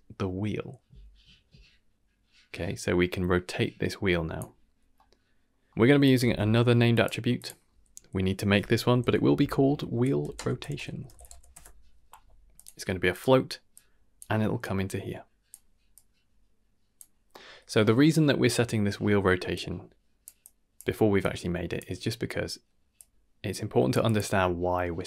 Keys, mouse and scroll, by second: 4.7 scroll down 2, 4.9 middle click, 5.7 middle click, 6.0 click, 6.2 shift+d, 7.3-11.5 drag, 9.2 e, 10.9 t, 12.5-13.1 drag, 13.7-14.1 drag, 14.6 click, 15.9-16.9 drag, 17.3 middle click, 19.5 click, 20.4-20.8 drag, 21.2-21.7 drag, 22.9 click, 24.0 click.